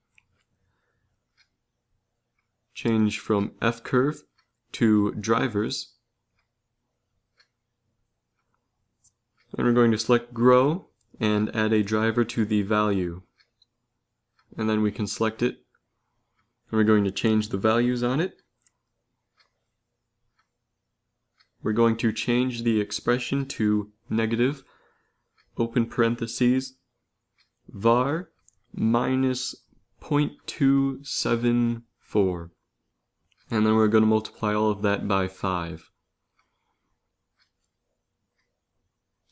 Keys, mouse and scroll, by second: 0.6 click, 5.2 n, 8.2 click, 12.6 middle click, 13.5-14.8 drag, 15.6-20.1 middle drag, 20.3-23.5 middle drag.